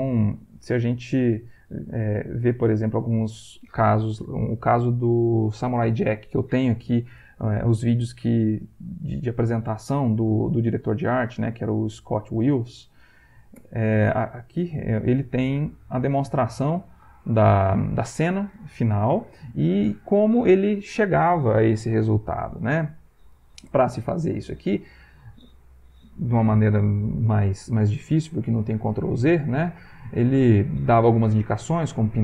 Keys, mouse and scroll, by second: 0.5 alt+Tab, 2.7 click, 12.5 click, 13.6 Return, 15.0 click, 15.1 middle click, 16.5 click.